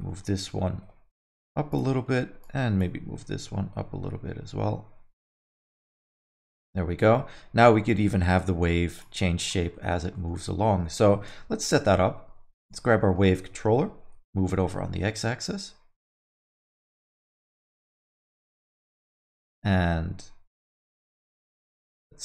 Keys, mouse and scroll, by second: 0.1 alt+middle click, 0.8 g, 1.9 middle click, 2.4 click, 3.5 g, 5.8 middle click, 6.1 alt+middle click, 6.4 Tab, 6.5 middle click, 7.6 click, 9.2 middle click, 9.4 scroll down 3, 9.7 middle click, 10.1 middle click, 11.1 shift+Left, 12.6 click, 13.0 middle click, 13.7 g, 16.4 middle click, 16.7 alt+middle click, 16.9 middle click, 17.4 g, 18.6 alt+middle click, 21.4 middle click.